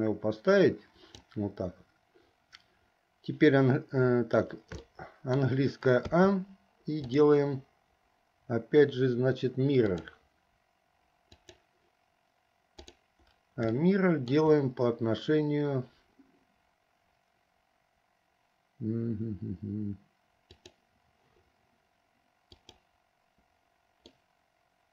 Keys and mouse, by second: 5.0 shift+middle click, 6.2 a, 7.1-10.2 drag, 11.5 click, 12.8 click, 14.0 shift+middle click, 20.7 click, 24.2-24.9 middle drag.